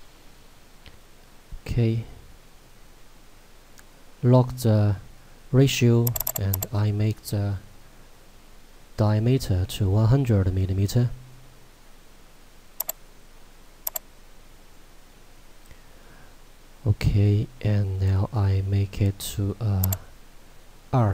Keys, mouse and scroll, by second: 6.1 click, 12.8 click, 19.9 click.